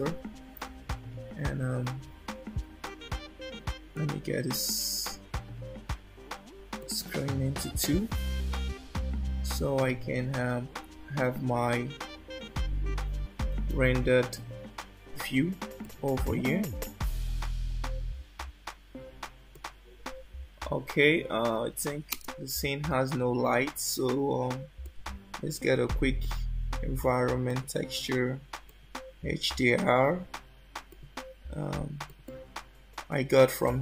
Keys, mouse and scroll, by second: 4.1 click, 6.8 click, 10.0 scroll down 2, 10.3-11.3 scroll up 9, 14.4 z, 19.6 click, 22.2 space, 24.8 click, 26.2 click, 28.6 click.